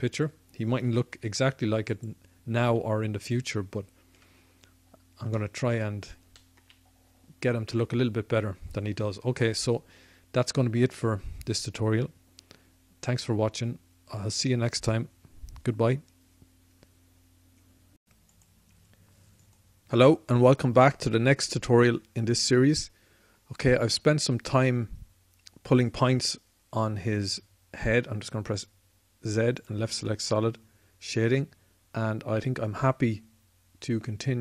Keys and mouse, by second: 0.8-1.8 middle drag, 0.8 z, 1.8-4.0 typing, 5.2-7.1 drag, 27.6 z, 30.6-33.5 drag.